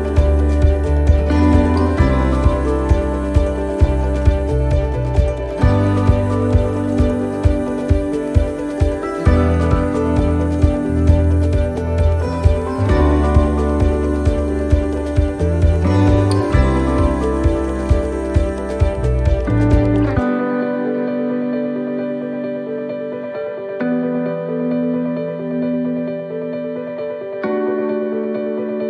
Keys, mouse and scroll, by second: 0.0 alt+shift+right click, 1.1 right click, 14.4 scroll down 1, 14.4 c, 18.0 scroll down 1, 21.8 scroll up 1, 22.1 middle click, 23.1 middle click, 24.9 shift+middle click, 26.4 shift+middle click.